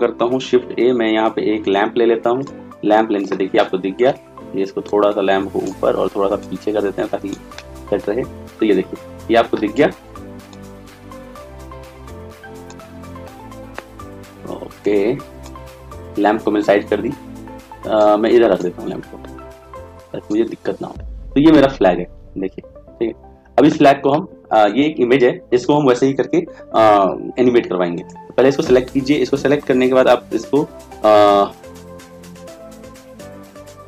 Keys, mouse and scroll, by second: 0.5 shift+a, 5.0 click.